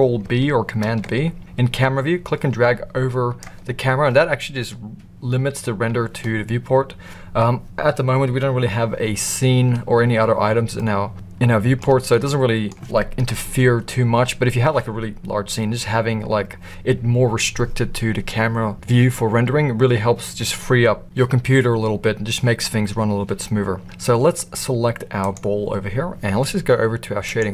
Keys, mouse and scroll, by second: 0.8 ctrl+b, 10.7-11.8 middle drag, 12.1-12.7 middle drag, 13.3 KP_0, 25.2 click.